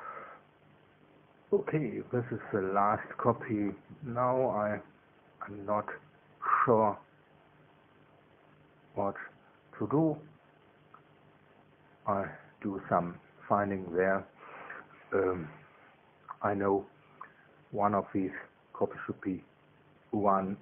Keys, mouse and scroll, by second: 0.1 click, 1.1 ctrl+v, 2.6 click, 4.5 click, 5.8 KP_1, 6.0 Tab, 6.3 KP_0, 6.5 Tab, 6.7 KP_1, 7.8 KP_Enter, 9.5-18.7 middle drag, 19.3 KP_1.